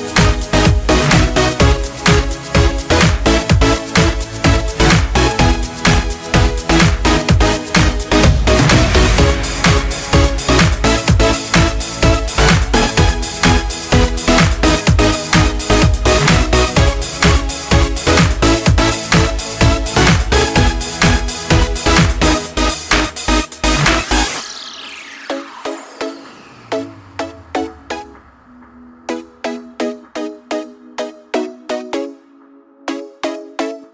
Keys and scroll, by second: 1.9-3.1 typing, 3.6 Return, 7.4-8.7 typing, 11.3-12.5 typing, 14.7-15.7 typing, 17.2 typing.